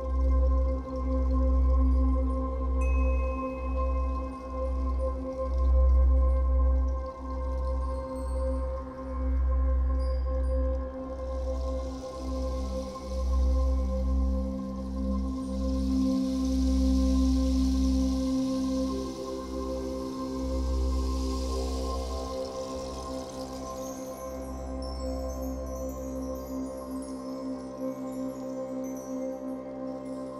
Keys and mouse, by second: 0.1 ctrl+s, 3.3-7.2 ctrl+alt+drag, 7.2 g, 7.4 x, 9.7-14.5 drag, 14.8-16.8 drag, 16.9-19.3 ctrl+alt+drag, 19.3 h, 21.0-26.3 drag, 27.6 click, 28.3 click.